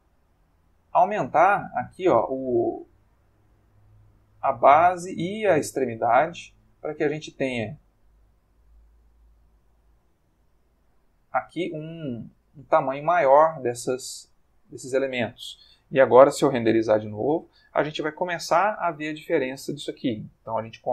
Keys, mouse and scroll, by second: 2.1-4.9 drag, 5.0-8.0 drag, 7.7 Escape, 8.3-10.0 drag, 10.2-12.1 drag, 12.4-15.1 drag, 16.6 F12.